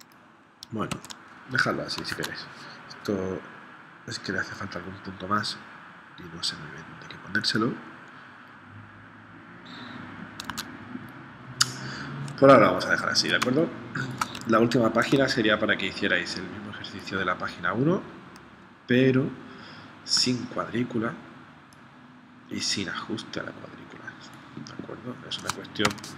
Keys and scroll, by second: 0.9 super+z, 2.1 super+Tab, 10.5 super+Tab, 13.4 space, 15.2 space, 25.9 v.